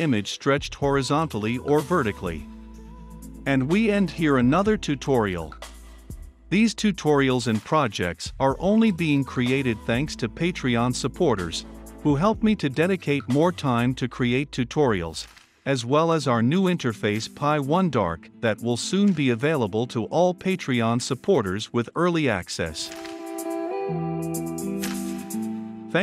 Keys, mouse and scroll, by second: 3.4 ctrl+F5, 7.7 ctrl+z, 10.8 ctrl+F5, 12.7 F5, 21.5 Return, 23.3 Return, 24.2 ctrl+F5.